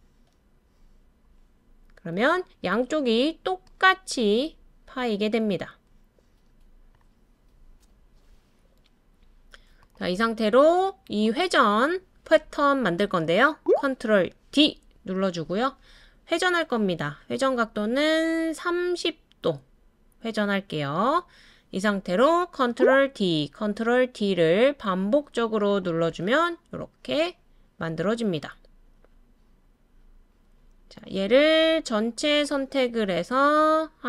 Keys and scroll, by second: 14.5 super+d, 23.0 super+d, 23.6 super+d, 24.1 super+d.